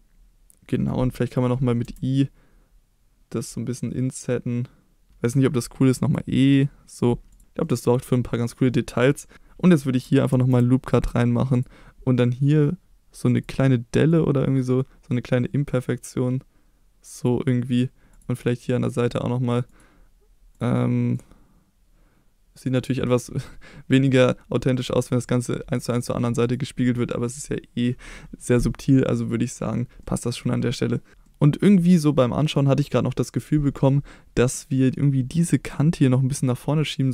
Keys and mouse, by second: 1.8 i, 5.1 e, 5.9 e, 6.9 click, 7.6 middle click, 8.3 middle click, 9.3 ctrl+z, 10.3 ctrl+r, 11.5 click, 13.4-17.2 drag, 17.6 middle click, 19.6 click, 21.1 click, 25.1 middle click, 25.9 middle click, 26.8 middle click, 28.9 middle click, 30.0 middle click, 31.2-31.5 middle drag, 36.8 middle click.